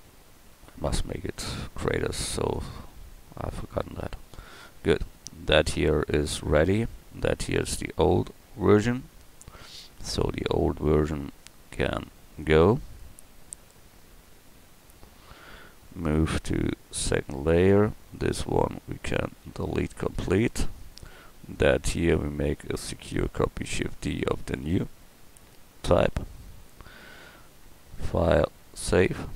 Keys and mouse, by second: 1.2 s, 2.5 click, 2.9 a, 3.6 a, 7.5-8.0 right drag, 8.0 middle click, 8.1 right click, 8.4 middle click, 12.8-14.2 drag, 16.3 m, 19.4 x, 22.6 shift+d, 25.1 middle click, 26.3 middle click, 27.9-28.6 middle drag.